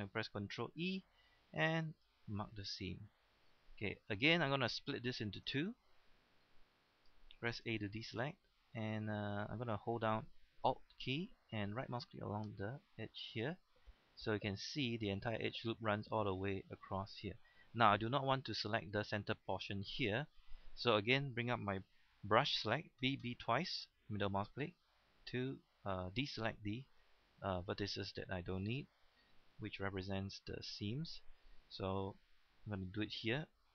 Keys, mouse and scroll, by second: 0.7 ctrl+e, 1.8 click, 2.7 middle click, 3.7 scroll up 1, 3.9 middle click, 4.2-4.8 scroll down 1, 4.8-5.1 scroll up 1, 5.6 shift+scroll up 1, 5.9 shift+middle click, 6.2-6.5 shift+scroll down 1, 6.5 middle click, 7.6 a, 7.9 middle click, 8.6-9.2 scroll up 1, 9.2 middle click, 9.4 scroll down 1, 13.3 alt+right click, 13.9-17.9 middle drag, 17.9-18.4 scroll up 1, 18.4 scroll down 1, 18.6-21.5 middle drag, 23.0-23.6 typing, 24.0-26.6 middle drag, 27.2-27.5 scroll down 1, 28.3 middle click, 29.3-29.6 scroll up 1, 29.9-30.3 scroll down 1, 30.3-31.7 middle drag, 32.0 scroll up 1, 32.3-33.7 scroll down 1.